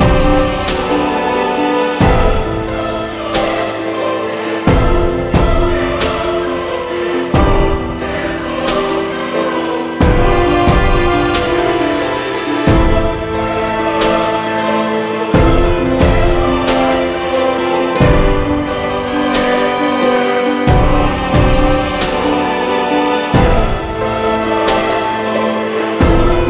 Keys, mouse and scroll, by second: 0.3 click, 2.6-3.3 scroll down 3, 3.4 click, 4.2 shift+a, 4.8 m, 6.1 Tab, 6.2 a, 6.3 s, 8.2 KP_7, 8.4 Tab, 8.8 g, 10.3 Tab, 10.4 s, 11.1 KP_1, 11.3 g, 12.1 scroll down 1, 12.3-18.2 shift+middle drag, 18.2 shift+a, 19.4 m, 20.1 click, 20.9 click, 22.4 click, 22.9-25.8 typing, 23.1 scroll down 10, 23.7-24.8 shift+middle drag, 24.8 click, 26.3 Tab, 26.4 scroll up 3.